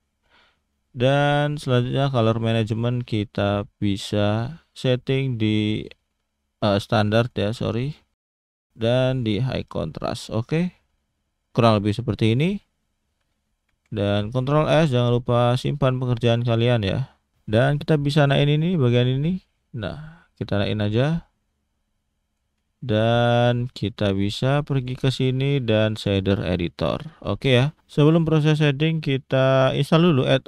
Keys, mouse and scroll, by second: 1.3-1.9 scroll down 1, 1.9 click, 2.4-3.3 scroll down 4, 3.3 click, 7.8 click, 10.2-11.0 scroll down 3, 11.0-13.1 scroll up 8, 13.7 ctrl+s, 17.9 click, 22.8 shift+middle click, 26.2 click.